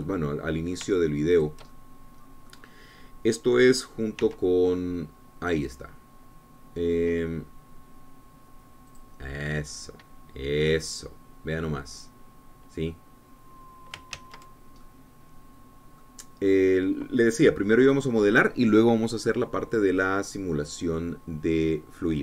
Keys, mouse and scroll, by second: 2.9-4.1 shift+drag, 5.6 s, 10.3 click, 11.9-12.2 scroll down 2, 12.2-15.5 drag, 15.6 ctrl+z, 16.2-22.2 ctrl+drag.